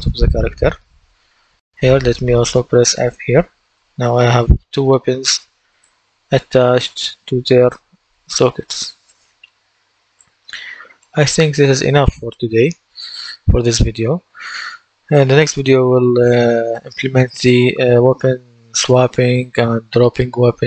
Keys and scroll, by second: 0.0-3.9 typing, 5.8 F8, 6.3-10.9 typing, 11.6 F8.